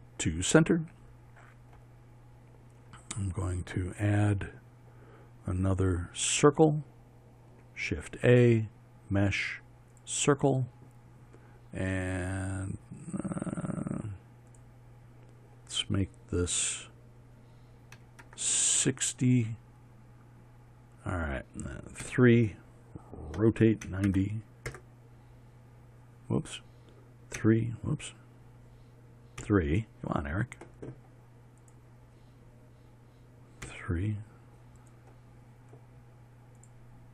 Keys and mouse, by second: 9.2 shift+a, 22.6 KP_3, 24.0 r, 24.5 KP_9, 24.7 KP_0, 25.3 KP_Enter.